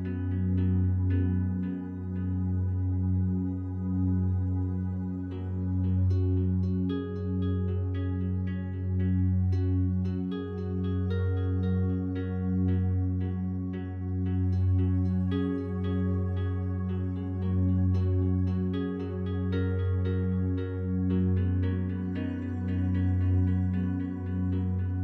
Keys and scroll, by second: 12.1 ctrl+0, 19.2 ctrl+z.